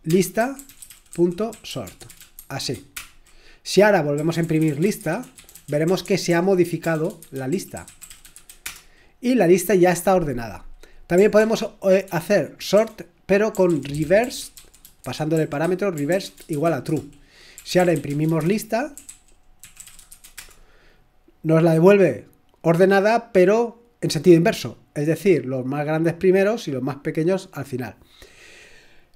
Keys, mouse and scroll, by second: 0.0-8.8 typing, 11.4 ctrl+p, 12.1 ctrl+p, 12.8-20.6 typing.